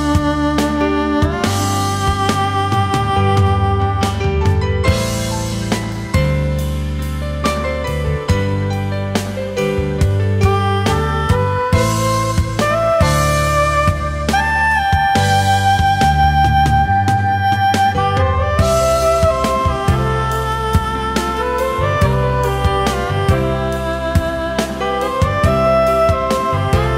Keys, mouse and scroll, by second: 14.0 shift+click, 17.5 ctrl+z.